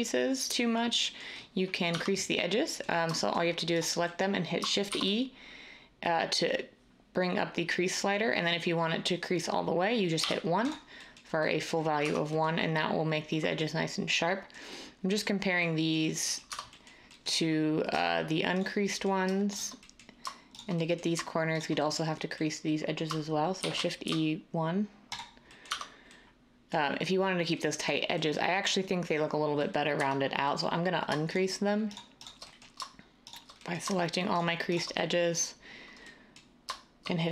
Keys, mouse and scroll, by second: 1.9 Tab, 4.9 e, 10.2 1, 12.0 Tab, 16.5 Tab, 23.6-24.0 typing, 25.7 Tab, 29.9 Tab.